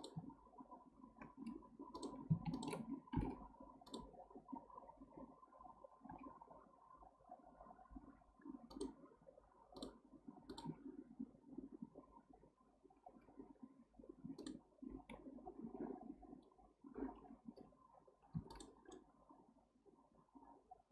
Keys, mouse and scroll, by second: 1.9 click, 2.5 shift+click, 3.1 m, 6.0 k, 14.4 click, 18.5 click, 18.9-20.9 middle drag.